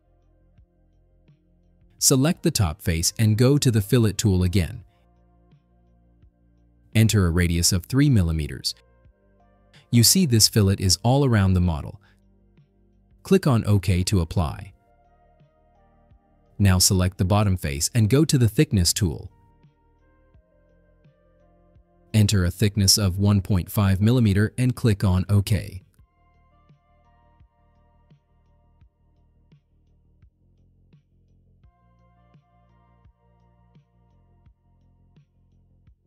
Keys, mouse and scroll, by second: 0.9 click, 2.4 click, 6.5 click, 8.7 3, 9.3 click, 14.9 click, 16.0 click, 17.5 click, 20.4 click, 23.3 1, 23.8 ,, 24.3 5, 25.3 click, 31.3 click, 32.7-33.5 drag, 34.3-35.4 drag.